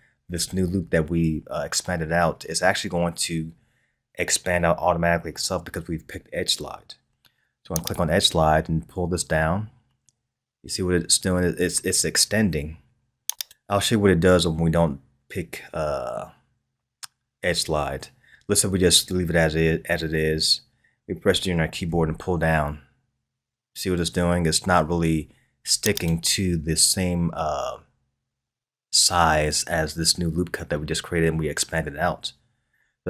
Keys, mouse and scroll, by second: 21.9 g.